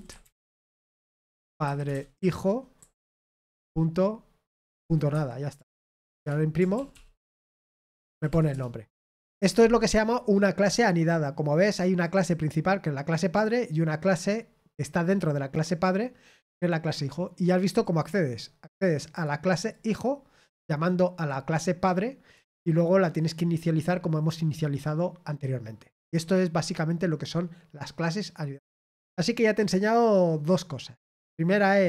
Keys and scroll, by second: 0.0-1.1 typing, 2.1-4.0 typing, 5.1 Escape, 5.4-6.6 typing, 6.7 ctrl+p, 6.9 ctrl+p, 7.3 Return, 8.1 ctrl+p, 8.2 ctrl+p, 8.5 Return.